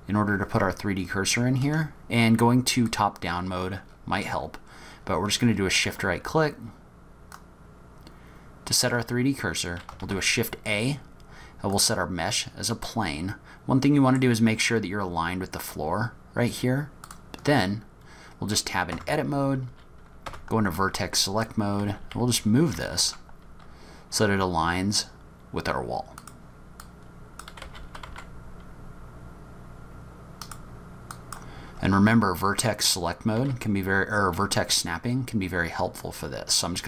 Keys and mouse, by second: 2.9 click, 7.3 shift+click, 10.0 shift+a, 13.0-14.2 middle drag, 17.1 drag, 18.9 Tab, 20.3 1, 20.8 click, 21.8 g, 26.9 click, 27.7 g, 31.3 click, 33.3 g.